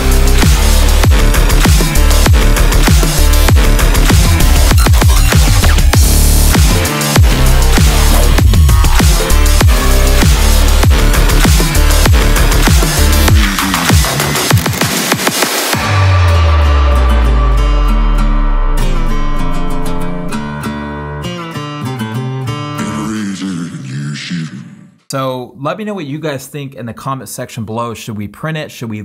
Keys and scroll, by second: 0.2 super+v, 1.7 Return, 2.0 super+a, 2.3 super+v, 2.4 super+t, 3.1 Return, 3.4 super+a, 3.7 super+v, 3.9 super+t, 4.9 Return, 5.1 super+t, 5.9 Return, 8.1 super+v, 8.1 super+t, 8.5 Return.